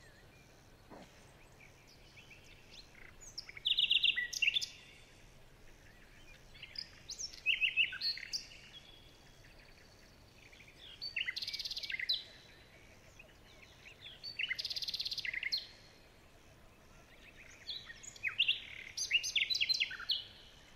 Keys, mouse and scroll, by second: 2.8 shift+click, 3.8 ctrl+z, 4.7 shift+click, 5.2-5.6 shift+scroll down 2, 6.2 alt+scroll down 3, 6.6 alt+scroll up 4, 7.0 alt+scroll down 1, 10.1 alt+scroll down 1, 10.3 alt+scroll up 1, 11.0 alt+click, 13.7 alt+scroll down 2, 14.0 alt+scroll up 2, 15.0 alt+scroll down 1, 15.3-15.6 alt+scroll up 2, 15.6 alt+scroll down 2, 15.9 alt+scroll up 1, 16.9 alt+click.